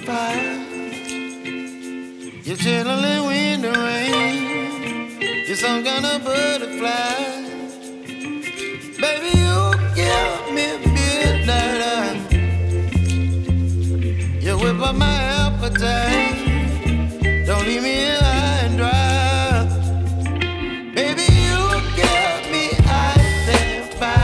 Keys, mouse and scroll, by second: 0.5 x, 1.5 typing, 4.1 click, 6.2 alt+click, 12.5-13.3 typing, 13.7 click, 16.6 ctrl+z, 17.5 click, 23.0 x, 24.0 click.